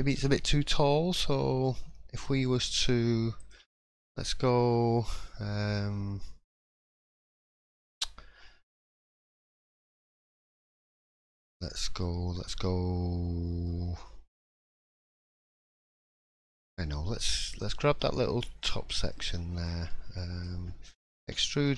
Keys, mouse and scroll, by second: 2.2-2.8 scroll up 1, 3.4 alt+click, 3.8 middle click, 4.0-4.3 scroll up 2, 6.7 alt+click, 7.6 shift+middle click, 10.0-10.7 scroll down 1, 10.7-11.0 scroll down 1, 11.6-12.3 scroll up 1, 13.6 middle click, 15.1 alt+click, 15.8 middle click, 16.3-16.7 scroll up 1, 17.5 click, 17.5 scroll up 2, 17.9 middle click, 18.2-18.6 scroll down 3, 18.6 middle click, 19.3 shift+middle click, 19.9 middle click, 19.9 scroll down 1, 21.2 e.